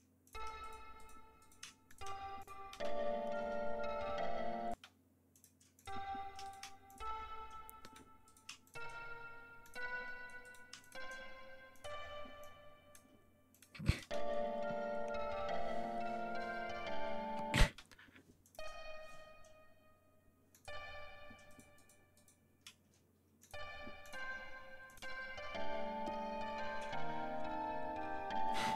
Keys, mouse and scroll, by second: 0.2 click, 0.5 shift+right click, 0.9 shift+right click, 1.3 shift+right click, 1.8 shift+click, 2.3 shift+click, 2.7 shift+space, 4.7 space, 5.3 click, 5.7 click, 6.4 shift+right click, 6.8 shift+click, 7.7 shift+right click, 8.2 shift+right click, 8.6 shift+click, 9.6 click, 10.3 shift+right click, 10.7 shift+click, 11.7 click, 12.3 click, 13.5 click, 13.8 click, 14.0 space, 16.7 ctrl+scroll down 2, 17.0 ctrl+scroll up 2, 17.6 ctrl+space, 18.4 click, 20.4 click, 21.4 shift+right click, 23.3 click, 23.9 click, 24.8 click, 25.0 space, 28.5 ctrl+scroll down 2.